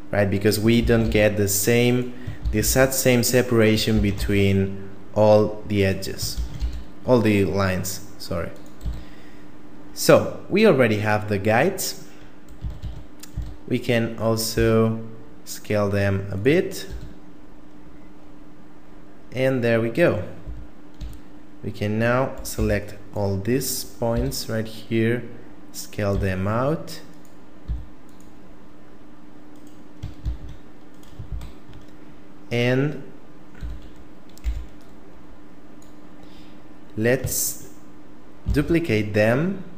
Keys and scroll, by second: 0.8 shift+d, 2.5 shift+d, 3.9 shift+d, 6.3 shift+d, 8.9 a, 12.6 a, 12.8 a, 13.3 a, 14.5 s, 16.9 a, 20.5 a, 21.0 a, 22.6 b, 24.1 s, 26.1 s, 27.7 s, 30.3 shift+d, 31.3 ctrl+z, 33.6 a, 34.5 b, 38.5 shift+d.